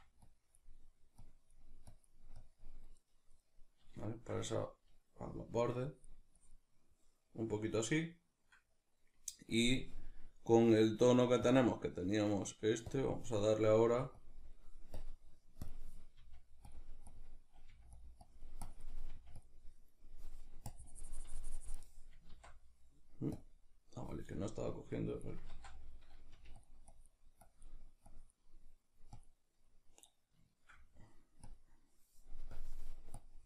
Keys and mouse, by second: 4.1-5.9 shift+middle drag, 5.9-8.0 drag, 8.0-13.8 middle drag, 13.8 f, 14.2 click, 16.2 click, 16.2 f, 17.7 click, 17.7 f, 19.1 click, 19.1 f, 22.3 ctrl+z, 22.3-24.5 drag, 25.5 ctrl+z, 25.5-26.7 drag, 26.4 f, 29.7-31.5 middle drag, 31.5-33.4 drag.